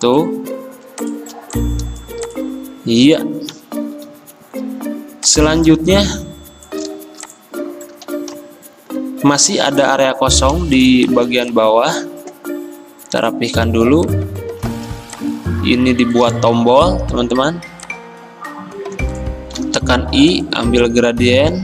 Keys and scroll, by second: 3.6 alt+Up, 3.8 alt+Up, 3.9 alt+Up, 16.8 m, 19.6 i, 21.4 a.